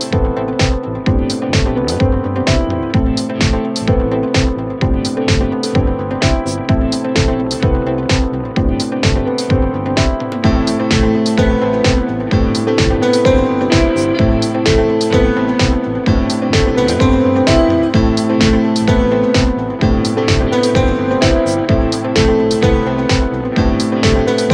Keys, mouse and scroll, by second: 3.3 click, 4.9 ctrl+r, 5.6 click, 7.0 s, 12.6 3, 15.2 click, 15.8 shift+click, 16.3 shift+click, 16.6 shift+click, 19.2 i.